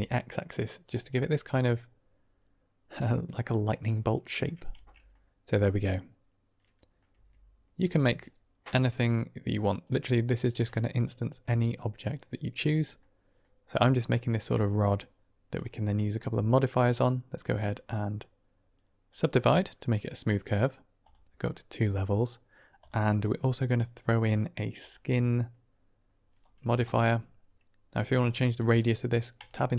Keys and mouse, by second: 0.7 click, 1.2 middle click, 3.0 middle click, 3.2 click, 4.0 click, 4.8 Tab, 5.1-6.9 middle drag, 7.0 Tab, 7.7 Tab, 9.8-10.4 middle drag, 12.9-13.3 drag, 16.7-19.0 drag, 22.7-24.8 drag, 28.2-28.7 middle drag, 29.3 Tab.